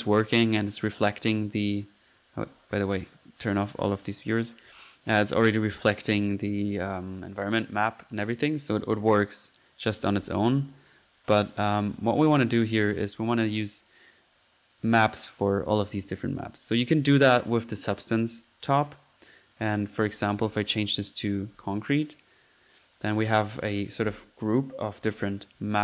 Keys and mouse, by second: 0.1 drag, 0.7 click, 1.2-2.4 typing, 1.8-2.1 drag, 2.5 click, 3.8-4.2 drag, 7.4-8.1 typing, 8.1 click, 8.8-10.2 drag, 10.3-10.7 drag, 11.0 click, 12.3 click, 12.7-13.4 typing, 12.9 middle click, 13.2 click, 13.6 click, 14.7 click, 15.3-15.7 drag, 17.4-18.1 drag, 20.1 click, 20.9-21.2 drag, 21.6 click, 21.9-22.4 middle drag.